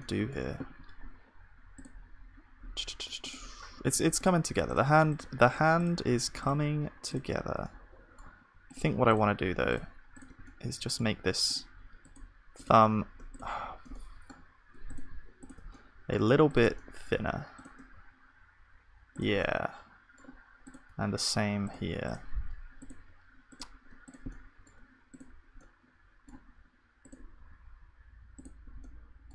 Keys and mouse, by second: 0.0-2.8 middle drag, 2.8-19.1 drag, 7.8-19.1 middle drag, 17.9 s, 20.7 s, 27.4 s.